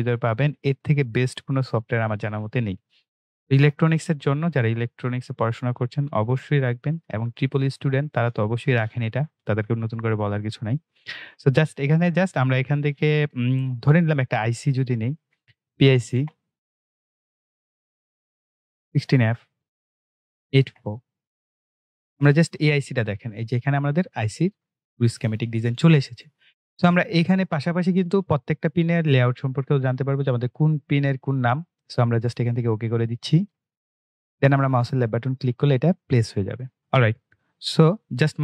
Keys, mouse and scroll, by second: 4.4-12.5 drag, 12.5-14.0 scroll up 1, 14.0 click, 15.7-16.7 typing, 17.8 c, 19.9 f, 22.7 click, 28.4-31.4 drag, 33.2 click, 37.4 right click.